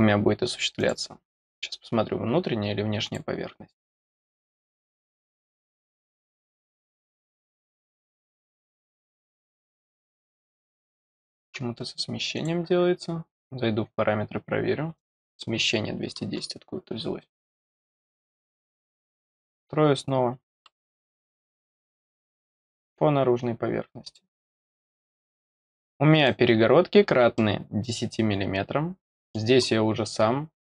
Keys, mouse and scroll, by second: 0.7 click, 3.0 click, 4.4-4.8 scroll up 1, 8.6 scroll down 1, 9.4 scroll up 2, 12.3 click, 14.9 click, 17.3 click, 19.1 click, 21.3 click, 22.5 click, 24.0 click, 25.8 middle click, 26.6 scroll down 2, 27.3-29.3 middle drag, 29.6-30.1 scroll up 1.